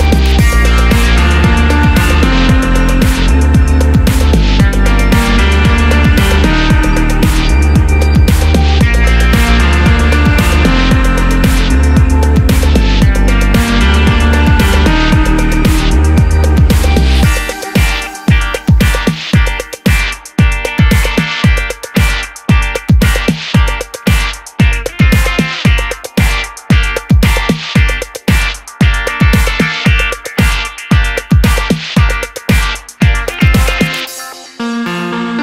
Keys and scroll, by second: 1.1-2.7 typing, 1.2 Return, 2.8 Return, 20.4 d, 27.4 BackSpace, 27.6 BackSpace, 33.6 super+d.